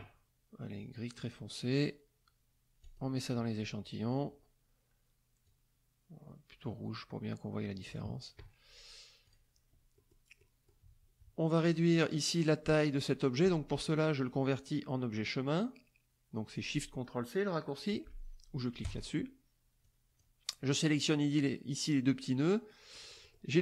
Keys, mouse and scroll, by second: 1.2 click, 2.8 click, 5.4-8.1 drag, 9.2 click, 9.9 middle click, 10.4 middle click, 11.6 click, 18.8 click, 19.8 click, 22.9 middle click.